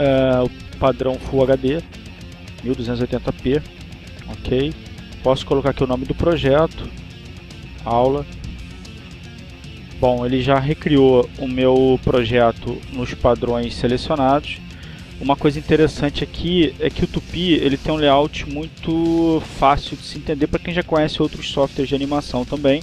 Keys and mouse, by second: 5.6 click, 7.4-9.1 typing, 10.0 click.